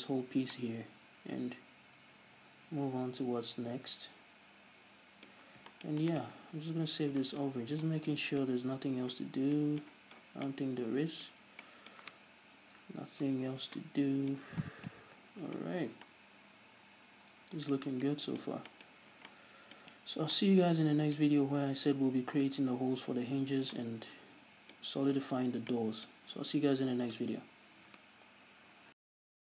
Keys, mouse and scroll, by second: 0.8 scroll down 2, 5.9-6.3 scroll up 2, 8.0-8.4 scroll up 2, 8.9 right click, 9.3 scroll up 2, 9.4-29.5 middle drag, 15.2 scroll down 2, 16.2 a, 18.5 scroll down 2, 19.6-19.9 scroll up 2.